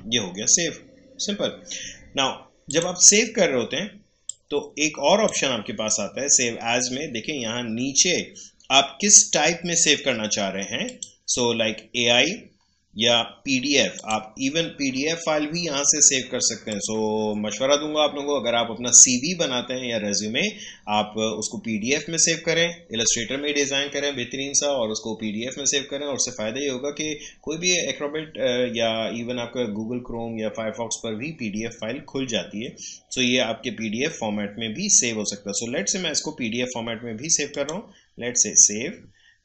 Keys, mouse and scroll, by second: 2.6-7.9 drag, 10.8 click, 13.9 click, 16.7 click, 37.5-39.4 drag.